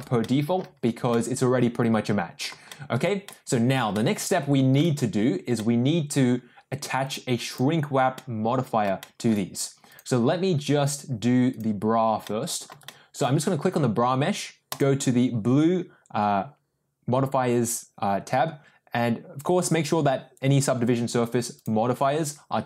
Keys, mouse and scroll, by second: 0.2-0.5 middle drag, 1.1-2.4 middle drag, 2.7 shift+middle drag, 3.2-3.7 middle drag, 3.9 shift+middle click, 5.5-6.2 middle drag, 7.0 click, 7.4 click, 8.2-8.8 middle drag, 9.0 shift+middle drag, 9.8 click, 12.2-12.7 middle drag, 12.8-13.1 shift+middle drag, 14.6 click, 21.5 click.